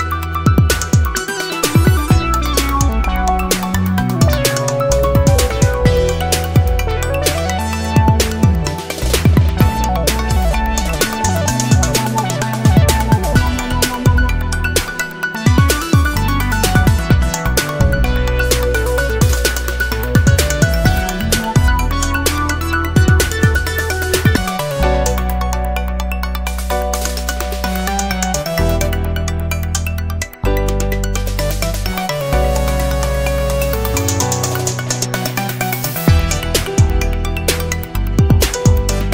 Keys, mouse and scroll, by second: 0.4-0.7 scroll down 1, 1.4 0, 3.0 click, 4.8 click, 6.8 click, 7.8 click, 8.4 click, 9.5 scroll up 1, 9.8 middle click, 10.7 click, 13.0 click, 14.0 click, 16.0 right click, 16.7 Escape, 18.1 click, 19.4-21.1 drag, 21.3 1, 22.4-22.9 scroll up 2, 23.5 scroll down 1, 24.6-28.6 drag, 28.8-29.3 scroll up 1, 30.2-30.6 scroll down 1, 31.3 click, 31.7 click, 32.4-32.7 scroll down 1, 34.3 0, 35.7 scroll down 2, 36.2-37.9 scroll up 2, 38.3 click.